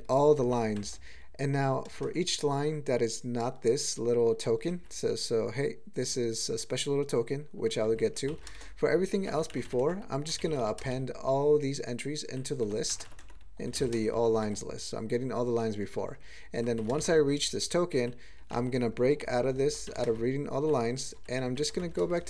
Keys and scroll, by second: 0.1 ctrl+g, 0.4 ctrl+n, 0.8 alt+m, 1.9 ctrl+space, 2.0 ctrl+e, 4.7 ctrl+n, 5.0 ctrl+e, 6.0 ctrl+n, 6.6 ctrl+g, 7.6 ctrl+n, 7.8 ctrl+n, 8.3 alt+m, 8.5 ctrl+space, 9.1 ctrl+g, 10.4 alt+<, 10.8 ctrl+space, 10.9-12.3 ctrl+n, 12.6 ctrl+g, 13.8 alt+m, 13.9 ctrl+space, 14.1 ctrl+alt+f, 14.4 ctrl+g, 15.6 ctrl+p, 15.8 ctrl+p, 15.9 ctrl+p, 16.0 ctrl+p, 16.8 alt+m, 16.9 ctrl+space, 17.9 ctrl+n, 18.2 ctrl+e, 18.5 ctrl+n, 19.0 ctrl+g, 19.2 ctrl+p, 19.4 ctrl+p, 19.5 ctrl+p, 19.8 alt+m, 20.0 ctrl+space, 20.1-20.7 ctrl+n, 20.8 ctrl+e, 21.1 ctrl+g, 21.3 ctrl+n, 21.4 ctrl+n, 21.8 alt+m, 22.0 ctrl+space, 22.1 ctrl+e.